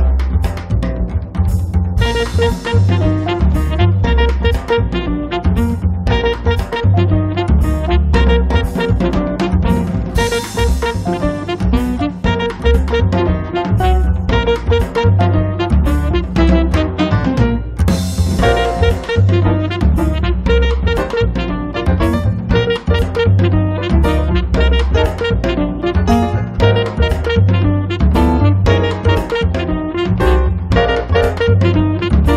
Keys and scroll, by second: 5.0 space, 11.5 space, 12.4 Escape, 16.3 space, 19.7 space, 20.4 Escape.